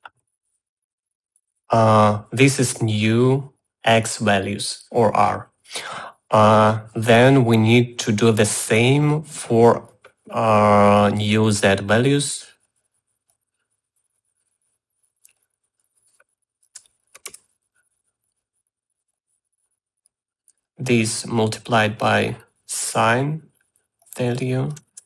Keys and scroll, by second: 17.4-18.3 typing.